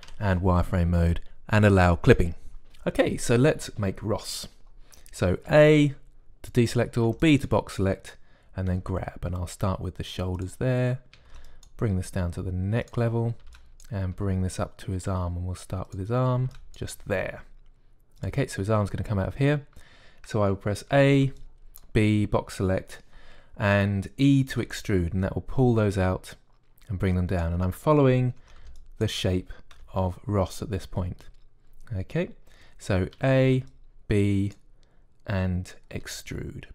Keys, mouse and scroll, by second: 0.9 z, 2.6-6.4 drag, 6.4 a, 7.9 b, 9.5 g, 12.0 a, 12.2 b, 12.8 g, 14.2 a, 14.3 b, 15.0 g, 17.2 a, 17.3 b, 17.8 g, 21.8 a, 22.0 b, 25.4 e, 29.2 a, 29.4 b, 30.6 g, 34.0 a, 34.3 b.